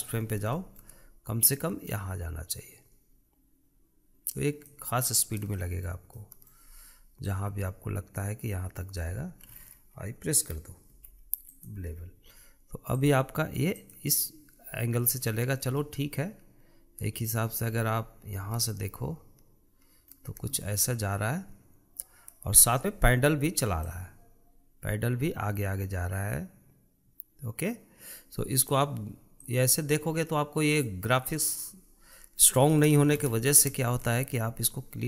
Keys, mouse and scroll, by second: 0.6-1.0 scroll down 4, 1.0-2.0 shift+middle drag, 2.0 click, 6.0-7.8 shift+middle drag, 7.8 click, 13.5-15.7 drag, 15.7 scroll up 5, 16.4-18.3 shift+middle drag, 18.3 scroll up 5, 19.2-23.2 shift+middle drag, 23.2 space, 24.6-27.6 drag, 30.0-32.7 drag, 32.7-33.8 middle drag, 33.8 shift+z, 34.4-35.0 shift+middle drag.